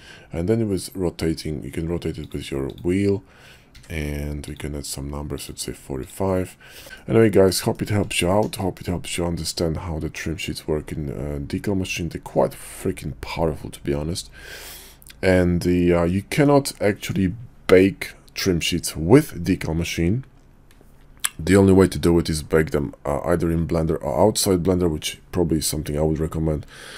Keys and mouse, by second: 2.6 click, 3.7 d, 6.7 Tab, 6.8 ctrl+z, 6.9-7.4 middle drag, 7.7 shift+middle click, 8.6 shift+middle click, 9.1-16.4 middle drag.